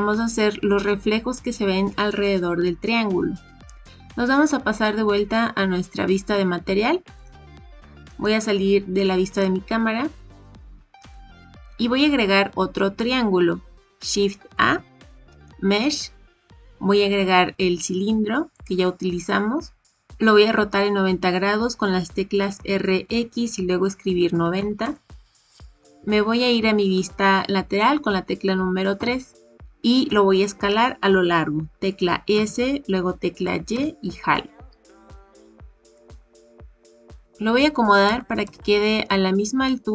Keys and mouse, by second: 7.1 click, 7.3 KP_0, 8.0-9.3 middle drag, 14.6 shift+a, 22.5 r, 28.9 KP_3, 32.3 s, 38.0 g.